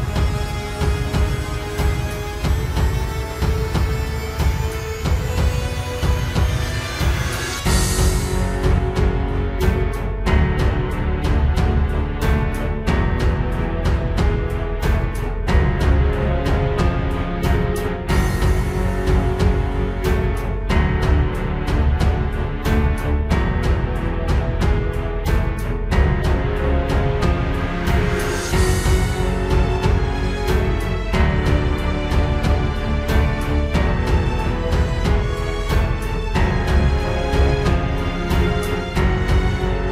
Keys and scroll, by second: 0.2 ctrl+space, 1.2 ctrl+space, 1.4 ctrl+s, 2.0 ctrl+space, 3.8 ctrl+space, 4.3 ctrl+s, 4.4 ctrl+space, 6.8 ctrl+j, 7.4 ctrl+t, 9.8 ctrl+t, 10.3 ctrl+z, 12.2 ctrl+t, 13.3 ctrl+space, 15.0 ctrl+space, 15.6 ctrl+t, 16.9 ctrl+space, 17.7 ctrl+space, 18.3 ctrl+space, 18.7 ctrl+t, 18.8 ctrl+z, 20.5 ctrl+z, 21.1 ctrl+space, 21.7 ctrl+z, 21.9 ctrl+space, 22.8 ctrl+space, 23.4 ctrl+space, 23.8 ctrl+t, 24.5 ctrl+z, 26.3 ctrl+space, 28.2 ctrl+space, 29.3 ctrl+space, 29.8 ctrl+t, 30.5 ctrl+space, 31.1 ctrl+space, 31.9 ctrl+space, 34.5 ctrl+space, 35.0 ctrl+space, 35.7 ctrl+t, 36.4 ctrl+t, 36.7 ctrl+z, 37.7 ctrl+t, 38.1 ctrl+z.